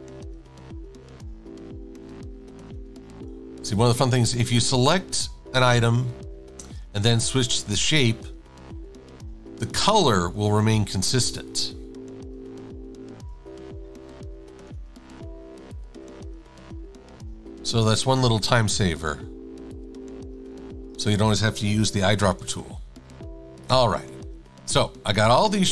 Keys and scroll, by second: 4.0 shift+a, 6.9 shift+super+a, 14.6 super+=, 14.7 super+=, 15.6 e, 18.3 shift+super+a, 21.1 shift+super+a, 21.9 super+-, 22.1 super+-, 22.3 super+-, 22.4 super+-, 22.7 super+=.